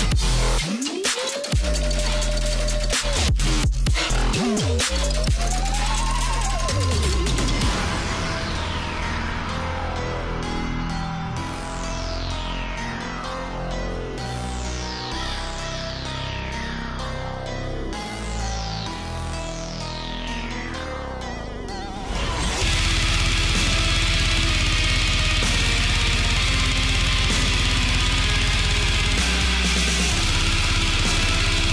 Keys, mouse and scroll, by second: 10.3-11.5 scroll down 1, 12.3 click, 15.5 click, 20.2 click, 23.6 click, 25.3-26.0 scroll down 1, 26.0 click, 28.0-31.1 drag.